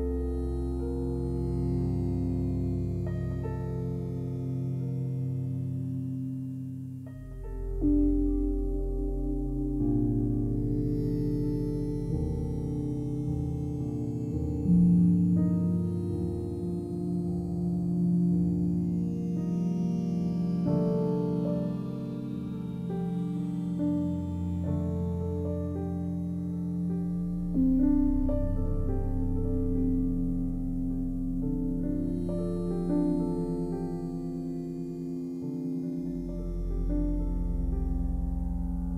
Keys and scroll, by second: 18.9 m, 32.4-33.4 typing, 34.3 Return.